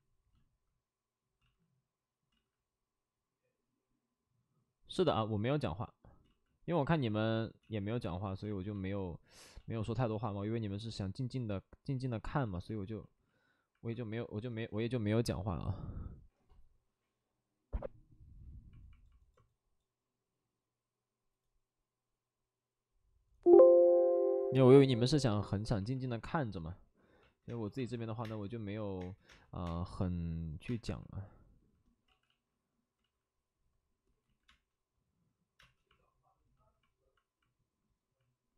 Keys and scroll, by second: 1.3 ctrl+z, 2.2 ctrl+z, 6.2 ctrl+z, 7.6 ctrl+z, 8.6 ctrl+z, 9.5 ctrl+z, 27.5-29.2 typing, 32.0 ctrl+z, 34.4 ctrl+z, 34.4 space, 38.0 space.